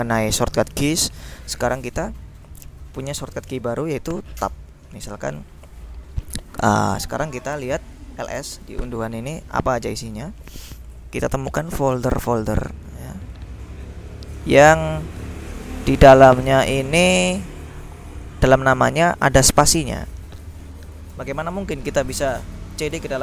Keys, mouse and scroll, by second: 8.1-9.0 typing, 12.6-14.0 drag, 14.1-15.4 drag, 15.9-17.5 drag, 18.1 click, 18.8-21.1 drag, 21.2 ctrl+l, 23.0 c.